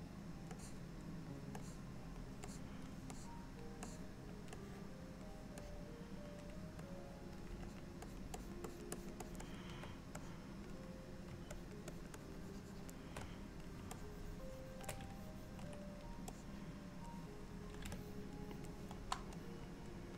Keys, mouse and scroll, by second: 0.6 click, 1.7 click, 2.5 click, 3.2 click, 3.9 click, 4.7 click, 5.7 click, 7.0 click, 7.7-8.3 shift+click, 8.1 shift+click, 8.7 click, 9.0 shift+click, 9.3 shift+click, 9.5 shift+click, 10.3 click, 11.6 shift+click, 12.0 shift+click, 12.5 shift+click, 13.4 click, 14.0 shift+click, 15.2 ctrl+click, 16.4 click, 18.0 middle click, 19.4 click.